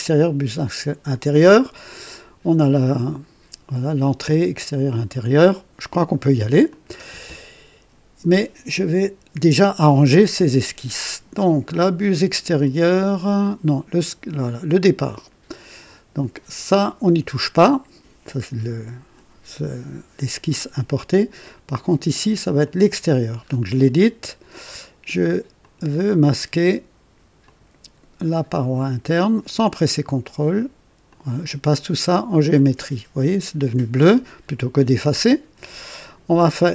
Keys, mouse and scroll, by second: 6.6 click, 22.4 click, 23.4 scroll up 2, 23.8-24.4 right drag, 25.5 click, 27.4 click, 28.7 click, 31.0 click, 32.5 click, 34.9 click.